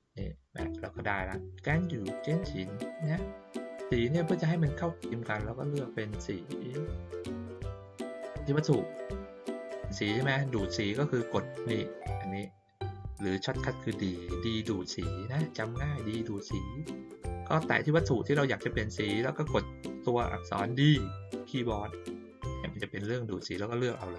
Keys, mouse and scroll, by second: 2.1 click, 2.9 click, 3.8 ctrl+middle click, 5.4 middle click, 7.0 click, 7.7 click.